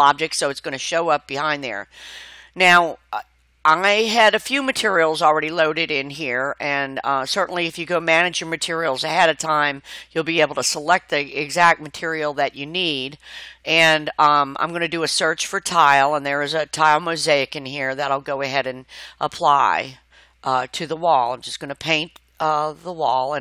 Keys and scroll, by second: 15.8 t, 16.1 i.